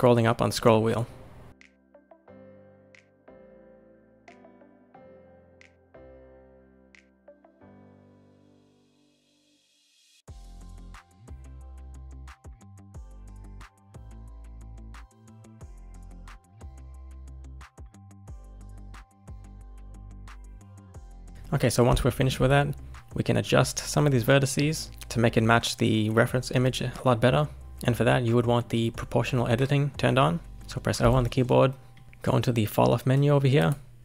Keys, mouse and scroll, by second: 1.9 shift+middle click, 2.2 click, 2.2 scroll up 2, 2.4 click, 2.7 ctrl+shift+b, 3.7 Left, 3.9 Left, 4.2 ctrl+shift+b, 5.5 shift+middle click, 5.6 scroll down 2, 5.7 shift+middle click, 5.8 click, 6.1 ctrl+shift+b, 7.8 shift+middle click, 8.1 click, 8.5 ctrl+shift+b, 9.5 click, 9.6 shift+middle click, 9.8 click, 10.0 ctrl+shift+b, 10.5 shift+middle click, 10.7 scroll up 2, 10.8 click, 11.1 ctrl+shift+b, 11.8 shift+middle click, 11.9-12.4 scroll up 2, 12.2 click, 12.3 shift+middle click, 12.7 ctrl+shift+b, 14.0 shift+click, 14.5 ctrl+shift+b, 15.6 click, 15.8 shift+middle click, 16.3 ctrl+shift+b, 17.4 click, 17.5 shift+middle click, 17.6 click, 17.9 ctrl+shift+b, 18.5 click, 18.6 shift+middle click, 18.8 scroll up 1, 18.9 shift+click, 19.1 shift+click, 19.4 ctrl+shift+b, 21.3 scroll up 1, 22.0-24.9 shift+middle drag, 31.0 o, 32.0-33.1 drag, 33.5-34.0 drag.